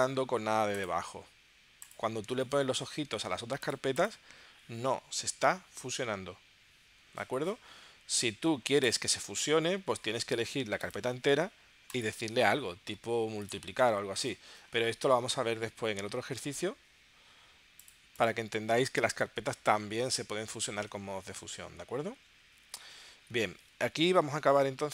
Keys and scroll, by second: 16.2 super+z, 23.3 super+Tab.